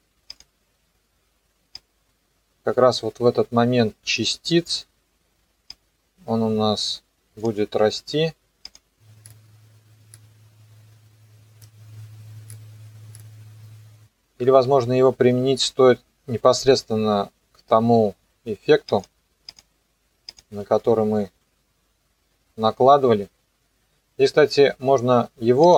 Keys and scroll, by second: 14.7 ctrl+x.